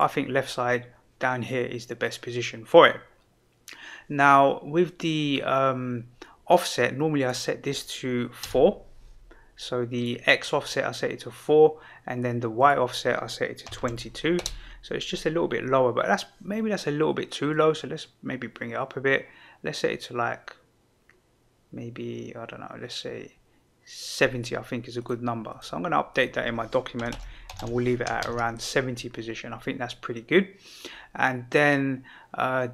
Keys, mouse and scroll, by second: 0.0 click, 7.1-10.0 drag, 12.5-15.2 drag, 13.8 KP_2, 17.5-24.2 drag.